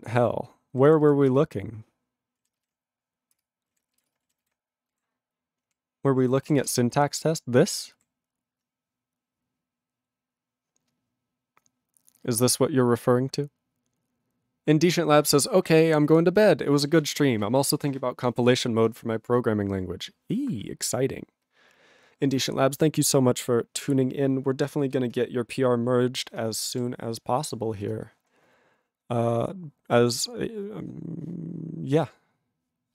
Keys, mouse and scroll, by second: 1.4 ctrl+Return, 3.4 ctrl+Return, 4.1 Return, 6.7 ctrl+Return, 8.0 ctrl+=.